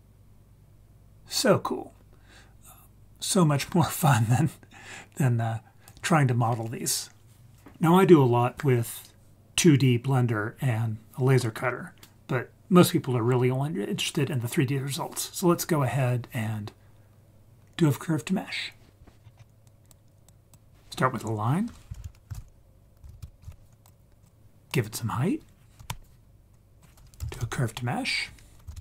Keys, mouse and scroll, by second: 19.2-19.6 scroll down 3, 19.3-19.7 scroll up 2, 19.7 click, 20.3 click, 21.9 shift+a, 24.7-25.9 drag, 26.5-28.8 drag.